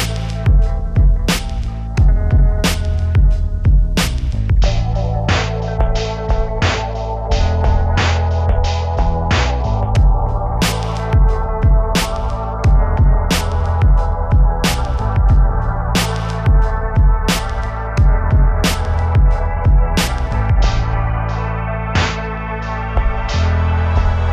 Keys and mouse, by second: 0.5 KP_7, 1.1 click, 1.3 right click, 2.0 right click, 2.1 click, 2.6 middle click, 3.1 right click, 3.2 click, 4.1 right click, 4.2 click, 4.4 click, 4.8 KP_1, 4.8 z, 4.9 z, 5.0 Tab, 5.6 KP_1, 9.5 right click, 9.6 Tab, 10.2-12.1 typing, 10.9 click, 11.6 click, 12.4 click, 13.8 a, 13.8 b, 14.8 click, 15.9 a, 16.0 b, 16.2 click, 17.2-19.2 typing, 17.4 click, 19.5 click, 19.8 click, 20.0 ctrl+r, 20.5 click, 21.0 Tab, 21.1 z, 23.2 click, 23.4 ctrl+z, 23.6 click, 23.8 shift+a.